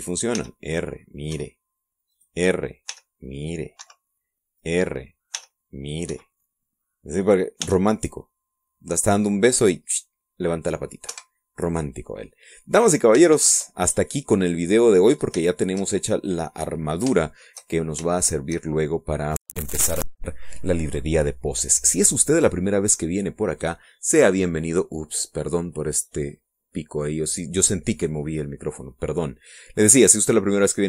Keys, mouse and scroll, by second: 0.0 middle click, 1.4 r, 2.4 Escape, 3.2 right click, 4.0 r, 4.9 Escape, 5.7 right click, 6.4 r, 7.2 Escape, 8.7 r, 12.2 Escape, 12.7 scroll down 1, 13.0 middle click, 14.1 scroll down 3, 14.5-16.1 shift+middle drag, 16.2-16.5 scroll up 3, 16.5 shift+middle click, 17.6 shift+scroll down 3, 18.3 shift+click, 19.7 shift+scroll up 1, 20.0 shift+middle click, 24.7 click.